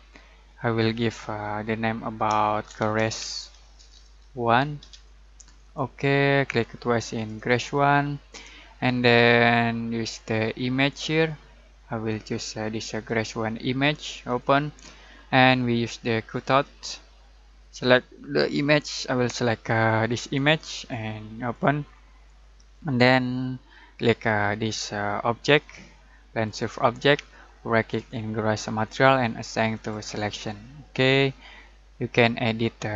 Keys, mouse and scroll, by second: 2.2-4.8 typing, 5.6-10.1 drag, 20.2 click, 24.5 click, 27.7 right click, 29.7 click.